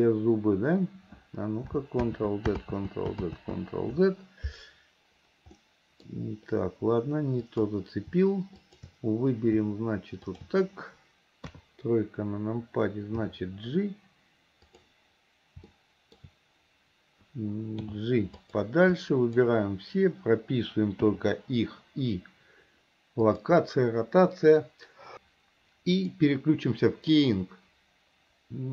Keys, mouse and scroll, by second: 2.1 ctrl+z, 5.6-6.3 middle drag, 7.5 click, 8.6 shift+click, 10.3 shift+click, 11.5 KP_3, 13.3 g, 15.7-16.2 shift+middle drag, 17.9 g, 19.0-19.5 drag, 21.0 i, 26.0-28.7 drag.